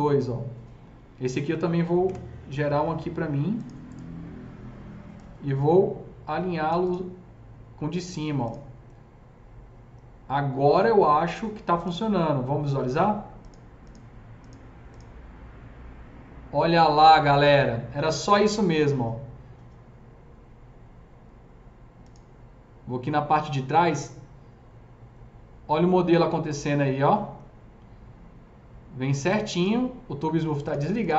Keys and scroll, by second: 1.9 KP_0.